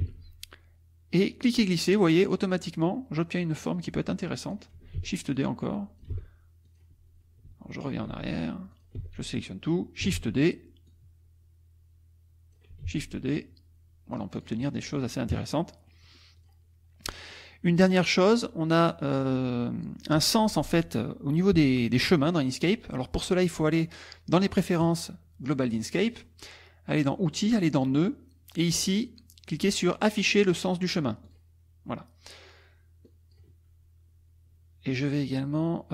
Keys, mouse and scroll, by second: 0.0 shift+d, 1.4-4.7 drag, 5.0 ctrl+d, 5.4 ctrl+click, 6.2 ctrl+z, 6.7 ctrl+click, 7.5 ctrl+z, 8.7 ctrl+click, 9.0 ctrl+a, 10.1 shift+d, 10.9-12.7 drag, 12.8 shift+d, 13.4-15.0 shift+drag, 15.3 KP_Subtract, 15.9 middle click, 16.4 click, 17.2 middle click, 23.5 click, 24.8 click, 25.8 click, 27.5 click, 31.2 click, 33.1 click.